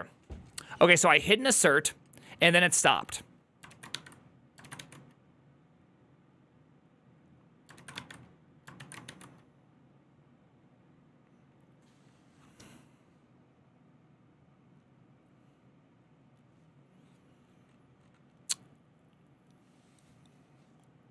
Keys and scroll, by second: 4.2-5.2 typing, 7.6 ctrl+a, 8.6 1, 8.6 ctrl+a, 8.9 2.